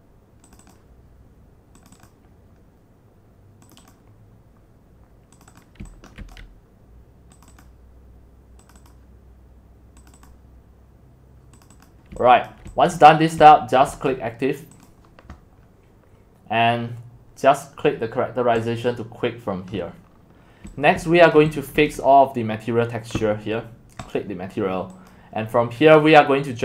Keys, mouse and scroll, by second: 0.0-3.0 drag, 3.8 click, 5.4 click, 5.8 x, 6.2 c, 6.3-9.5 drag, 10.1 click, 11.7 click, 12.1 x, 12.5 click, 12.9 click, 13.8 click, 14.1-15.7 drag, 18.7 click, 20.1-20.6 scroll down 7, 20.7-21.8 typing, 21.3 click, 21.9 click, 22.1-23.2 scroll down 5, 23.2-24.1 scroll down 1, 24.1-25.5 drag, 25.5-26.6 scroll down 1.